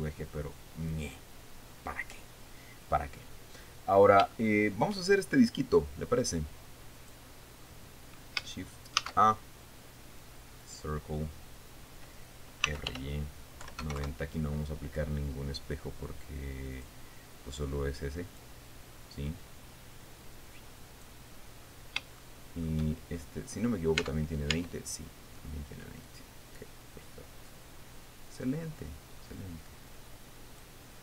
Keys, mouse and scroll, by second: 4.4-4.8 scroll up 2, 4.9 shift+middle click, 7.5 click, 8.2-8.5 scroll down 2, 9.6 shift+a, 11.2 click, 13.0-14.4 typing, 14.6 KP_Enter, 16.3-17.6 drag, 18.1 click, 19.8-21.8 drag, 22.0-22.4 scroll up 2, 22.8 shift+middle click, 23.9-24.5 scroll up 2, 24.6 Tab, 26.6-31.0 drag.